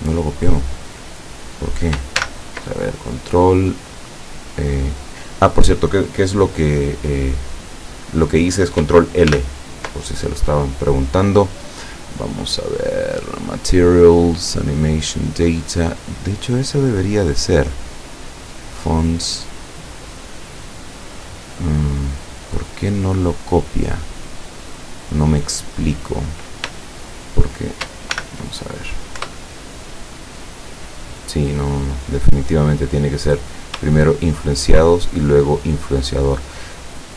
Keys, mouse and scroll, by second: 0.2 shift+right click, 2.2 ctrl+shift+l, 9.3 ctrl+l, 22.0 click, 22.6 right click, 23.2 right click, 24.3 right click, 26.8 shift+right click, 27.3 shift+right click, 28.2 ctrl+shift+l, 29.3 Return, 30.3 right click, 31.0 right click, 31.8 right click, 32.2 right click, 33.3 right click, 34.0 shift+right click, 34.8 shift+right click.